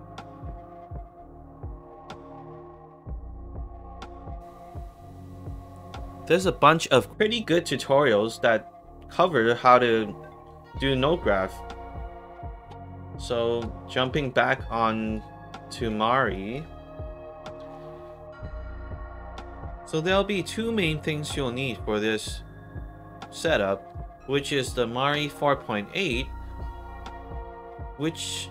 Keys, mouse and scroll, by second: 2.5 click, 4.8 middle click, 4.8 scroll down 2, 5.8 click, 7.4-9.5 middle drag, 7.4-8.7 scroll down 2, 8.7-10.2 scroll down 2, 9.7 middle click, 13.4 click, 14.7 alt+click, 15.3 alt+middle click, 15.6 alt+right click, 16.2 alt+click, 18.2 click.